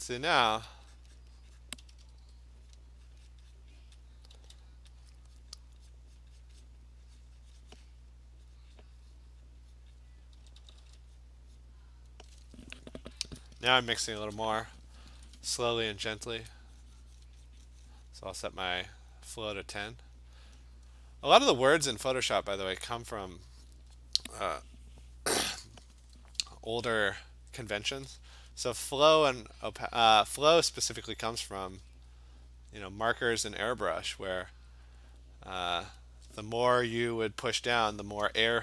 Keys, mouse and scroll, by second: 0.1 click, 0.4 click, 0.6 click, 1.0 click, 1.2 click, 1.5 click, 1.7 click, 1.8 alt+click, 1.8 ], 2.0 ], 2.2 ], 2.8 click, 3.2 click, 3.3 click, 3.6 click, 3.9 click, 4.1 click, 4.4 [, 5.0 alt+click, 5.4 click, 5.6 click, 5.9 click, 6.2 click, 6.4 click, 6.7 click, 7.0 click, 7.2 click, 7.4 alt+click, 7.7 click, 7.9 click, 8.1 click, 8.3 click, 8.6 click, 8.8 click, 9.3 click, 9.5 click, 9.8 click, 10.4 [, 10.6 [, 10.8 [, 11.2 click, 11.6 click, 14.0 !, 15.2 ], 15.3 click, 15.5 ], 15.9 ], 16.3 click, 16.3 !, 17.3 click, 17.5 click, 18.2 click, 18.4 click, 18.7 click, 19.2 click, 19.3 click, 19.5 click, 19.7 click, 19.9 click, 20.1 click, 20.3 click, 20.8 click, 21.0 click, 21.2 click, 21.5 click, 21.6 click, 21.9 click, 22.1 click, 22.6 click, 22.9 click, 23.1 click, 23.4 click, 23.9 click, 27.9 [, 28.2 [, 28.5 [, 28.8 click, 29.0 click, 29.4 click, 29.9 click, 30.0 click, 30.3 click, 31.4 alt+click, 31.6 ], 31.8 ], 32.2 click, 32.6 click, 32.9 click, 33.2 click, 33.6 click, 33.8 click, 34.4 alt+click, 34.8 click, 35.1 click, 35.6 click, 35.9 click, 36.4 [, 36.5 click.